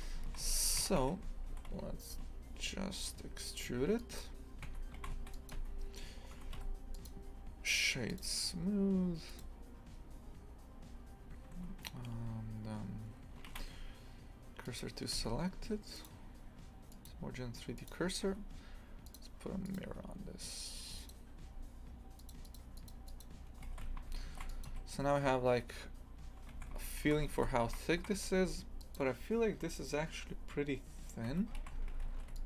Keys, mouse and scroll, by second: 0.3 shift+f, 0.8 a, 1.0 a, 1.5 e, 4.7 Tab, 5.0 shift+f, 5.5 Tab, 6.4 Tab, 7.1 w, 11.5 Tab, 14.8 shift+s, 15.1 Tab, 17.9 click, 18.2 Tab, 21.1-23.7 drag, 23.7 shift+f, 24.7 a, 26.6 shift+f, 31.3 Tab, 31.6 shift+f.